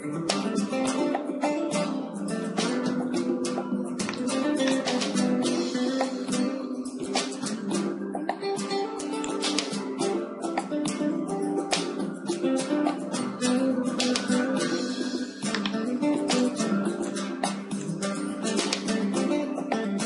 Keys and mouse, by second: 4.1 middle click, 5.1 z, 6.3-7.5 drag, 7.5-10.4 right drag, 8.9 x, 14.6 KP_7, 15.0 shift+d, 16.5-20.0 drag, 17.9 g.